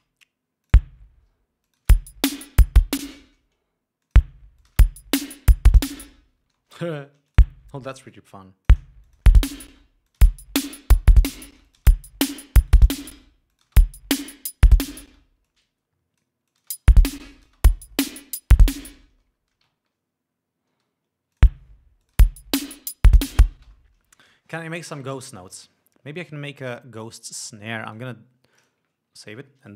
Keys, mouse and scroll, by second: 0.2 ctrl+space, 0.9 click, 1.9 click, 2.1 space, 3.3 space, 4.3 click, 4.9 click, 5.0 space, 6.7 space, 7.3 shift+right click, 7.6 shift+click, 8.3 shift+right click, 8.6 shift+click, 9.3 shift+click, 9.5 shift+space, 10.4 shift+click, 11.8 space, 11.9 click, 12.9 shift+right click, 13.5 shift+space, 13.8 shift+click, 15.4 space, 15.7 click, 16.8 click, 16.9 space, 17.6 space, 17.6 click, 19.4 ctrl+scroll down 2, 19.9 ctrl+space, 20.1 ctrl+scroll up 2, 21.6 click, 22.3 click, 22.5 space, 23.9 space, 24.1 ctrl+scroll down 2, 26.9 click, 27.6 click, 28.2 right click, 28.9 ctrl+click, 29.5 ctrl+s.